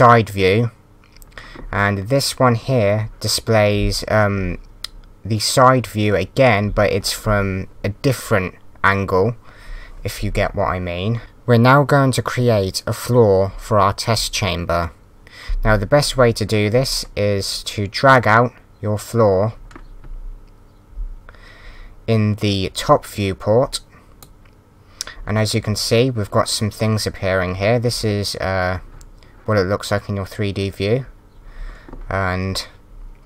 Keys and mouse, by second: 18.1 click.